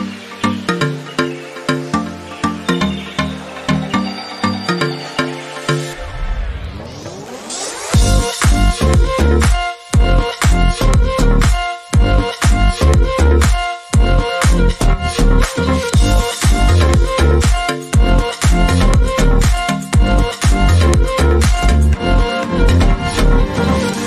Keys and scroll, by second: 4.7 ctrl+g, 10.4 ctrl+z.